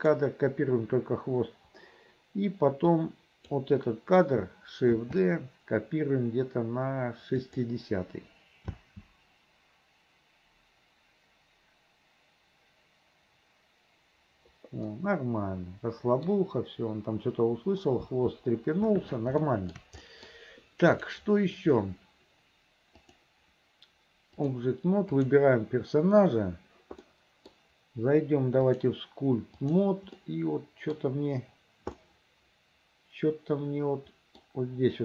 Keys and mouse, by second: 3.0 click, 5.1 shift+d, 8.8 space, 15.0-16.4 middle drag, 18.1 space, 19.6 shift+click, 20.1 click, 21.1 click, 23.1-24.7 drag, 25.3 click, 27.2 middle click, 28.8-29.9 drag, 30.2 middle click, 32.1-34.5 middle drag.